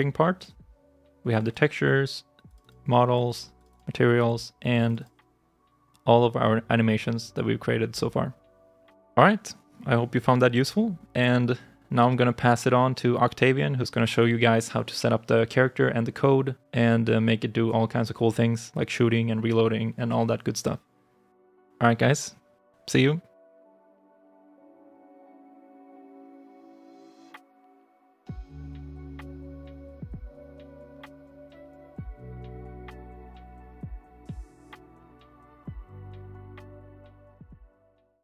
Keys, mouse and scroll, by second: 1.3 double click, 2.5 double click, 3.5 double click, 4.8 double click, 13.5 double click.